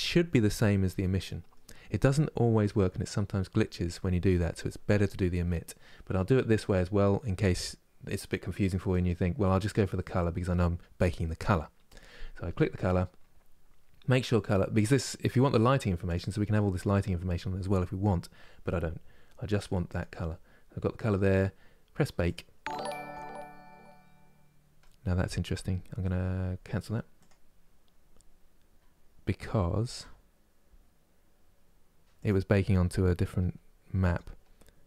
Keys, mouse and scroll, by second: 24.5-27.0 middle drag, 27.0-34.1 drag.